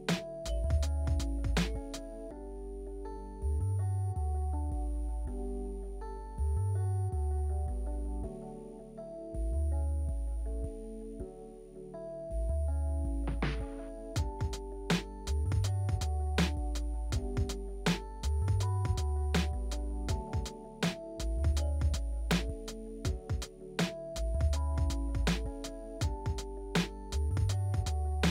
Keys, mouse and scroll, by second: 9.1 F3, 12.0 F3.